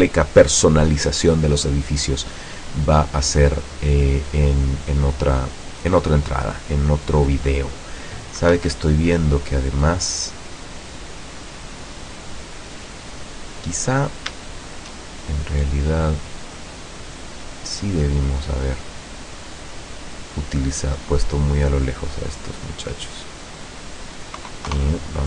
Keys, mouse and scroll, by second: 8.6 Escape, 9.1 middle click, 11.5-11.9 scroll up 2, 12.1-12.4 scroll down 2, 13.1-13.4 scroll down 2, 14.1 shift+right click, 14.6 shift+right click, 15.7 click, 17.9 middle click, 19.6 right click, 21.4-23.9 drag, 24.8 KP_0.